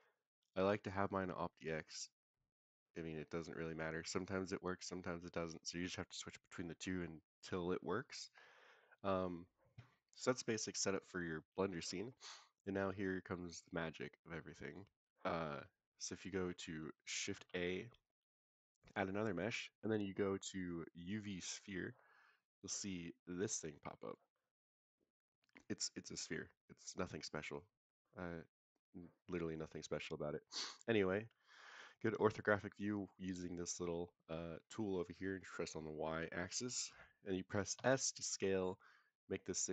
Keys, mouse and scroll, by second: 10.4-11.7 middle drag, 12.5 click, 17.3 shift+a, 22.5 click, 23.2-24.2 drag, 24.3-28.0 middle drag, 28.2-28.5 scroll up 2, 28.5-29.6 scroll down 2, 29.7 click, 30.3-31.3 scroll down 3, 30.8-31.3 scroll up 1, 31.3 scroll up 1, 31.4 shift+middle drag, 32.4 scroll up 2, 36.6-37.7 scroll down 3, 37.7 s.